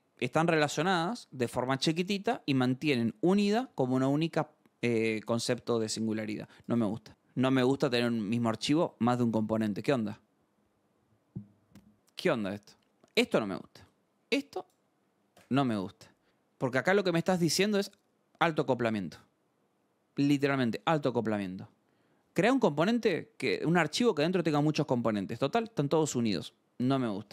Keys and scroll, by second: 26.4 alt+Tab.